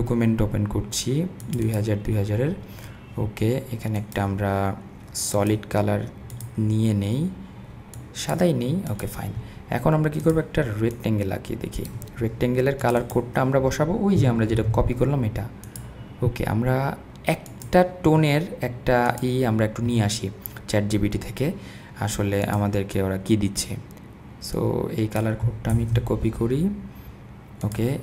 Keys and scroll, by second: 14.5 super+v, 25.7 super+c.